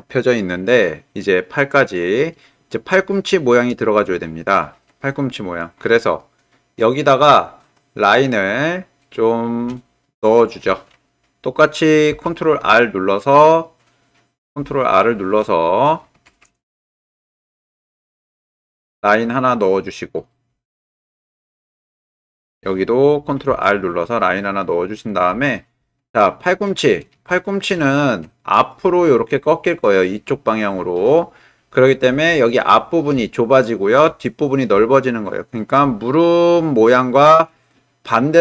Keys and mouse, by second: 0.9 middle click, 2.4 middle click, 3.5 shift+click, 4.2 ctrl+click, 5.1 middle click, 6.3 shift+click, 7.3-9.6 drag, 10.0 shift+middle click, 12.1 ctrl+r, 17.1 w, 18.2 ctrl+r, 20.2-21.3 drag, 23.5 ctrl+r, 25.0-26.6 drag, 26.6 middle click, 27.4 shift+middle click, 27.9 ctrl+middle click, 28.4 middle click, 33.5 shift+middle click, 34.9 middle click.